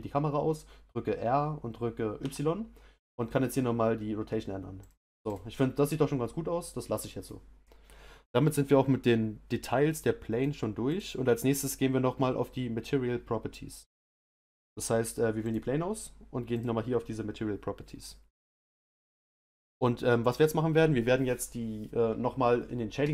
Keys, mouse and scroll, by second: 5.3 click, 7.2 click, 15.5 click.